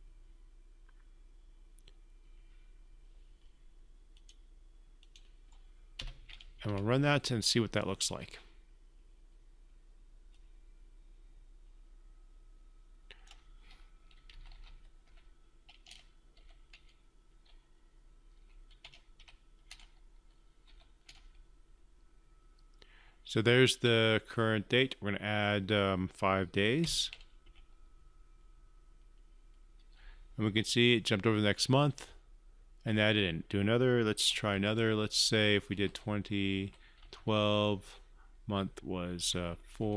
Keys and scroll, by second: 6.8 ctrl+F5.